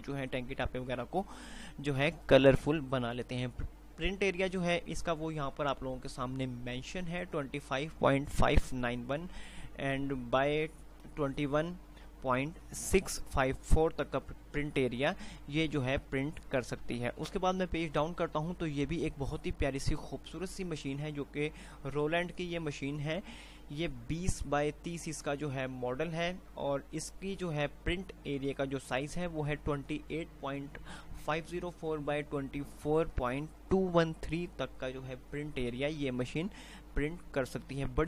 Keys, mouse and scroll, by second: 16.7 F5, 17.7 Page_Down, 26.9 click, 27.5 right click, 37.5 F5.